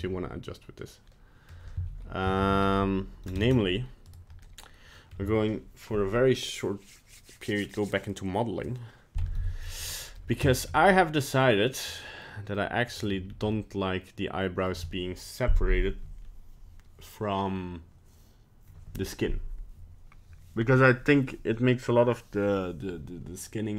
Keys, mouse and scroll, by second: 0.0 middle click, 1.1 middle click, 1.3 middle click, 1.5 middle click, 1.8 a, 2.4 alt+r, 2.5 alt+g, 3.5 ctrl+Tab, 4.0 right click, 4.4 middle click, 5.1 middle click, 9.4 Tab, 9.6 scroll up 3, 9.9 middle click, 10.1 middle click, 10.5 shift+middle click, 10.7 shift+middle click, 10.7 middle click, 11.7 middle click, 11.8 middle click, 11.9 shift+middle click, 12.3 middle click, 13.0 right click, 13.3 scroll down 1, 13.5 middle click.